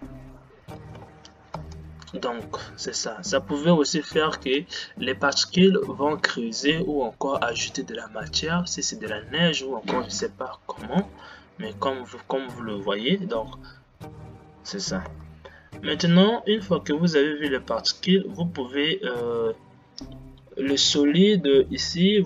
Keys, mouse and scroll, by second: 1.2 shift+Left, 1.7 space, 4.8 space, 15.4 space.